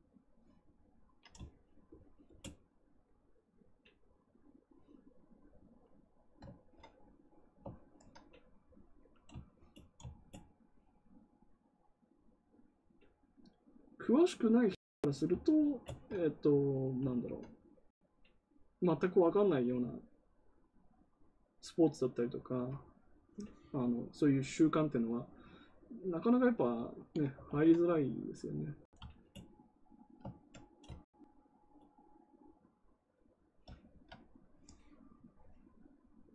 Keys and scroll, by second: 27.4 ctrl+z.